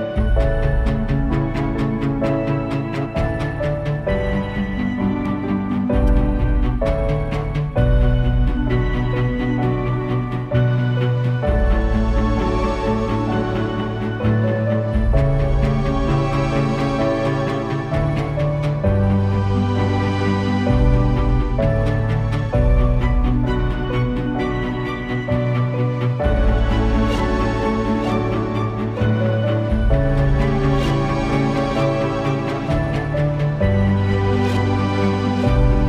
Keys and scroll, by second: 4.6 space, 12.2 space, 12.9 super+space, 23.6 super+g, 24.0 super+[, 26.2 space, 26.9 alt+super+space, 27.4 space, 28.1 space, 28.6 space, 28.8 space.